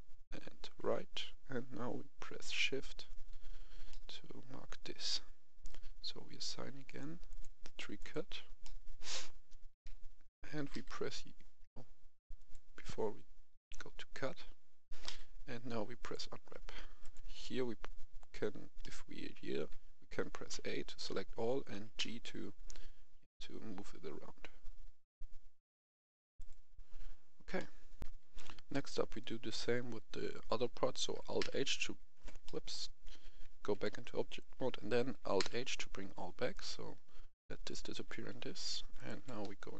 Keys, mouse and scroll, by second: 2.9 shift+right click, 3.8-5.2 middle drag, 6.8 click, 8.6 middle click, 9.7-10.6 typing, 12.3 click, 15.0 typing, 15.9 click, 18.7 middle click, 20.4 a, 21.9 g, 26.3 click, 27.5 middle click, 27.9 F11, 28.0 F10, 28.7 middle click, 29.1-29.9 scroll down 1, 31.3 alt+h, 32.4 middle click, 33.7 Tab, 35.3 alt+h, 36.5 right click, 37.6 right click, 38.5-38.9 scroll up 1, 38.9 right click, 39.1 Tab, 39.6 a.